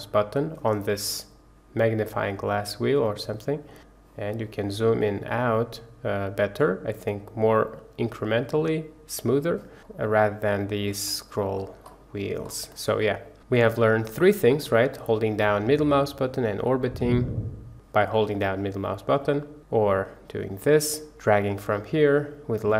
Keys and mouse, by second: 2.6-6.5 drag, 7.6-9.5 drag, 13.0-13.3 middle drag, 13.5-14.0 middle drag, 14.5 middle click, 15.9-16.9 middle drag, 18.0-18.9 middle drag, 19.8-20.9 drag, 21.1-22.7 drag.